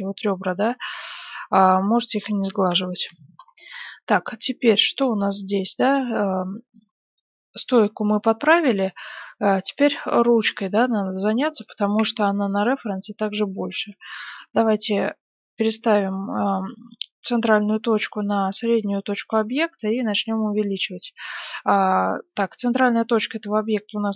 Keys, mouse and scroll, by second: 0.0 click, 0.5-3.0 middle drag, 1.9 z, 3.0 KP_1, 3.4-5.5 middle drag, 4.7 Tab, 5.6-6.7 drag, 6.7 middle click, 8.5-11.6 middle drag, 12.0 KP_1, 12.5-16.0 middle drag, 15.5 ., 19.4 s, 20.8-22.9 drag, 23.1-24.1 middle drag.